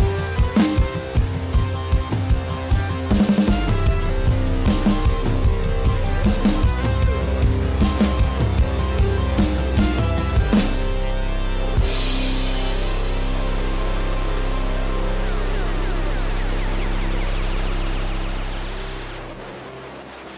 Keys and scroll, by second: 4.3 ctrl+=, 4.4 ctrl+-, 4.8 ctrl+=.